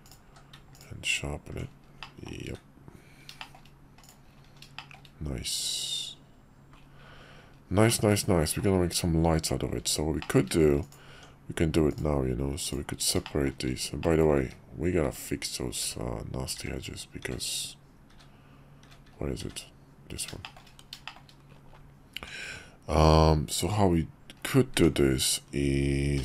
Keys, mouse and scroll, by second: 0.0 click, 0.2 q, 2.0 middle drag, 2.4 `, 3.4 shift+middle drag, 4.0 click, 4.8 shift+middle click, 7.9-8.6 middle drag, 10.2 shift+middle click, 10.8 click, 11.1 Tab, 11.9 click, 12.6 click, 13.2 shift+middle click, 14.0 middle click, 15.0-19.4 typing, 20.4 shift+click, 21.0 shift+click, 22.1 Tab, 24.9 Tab, 26.1 k.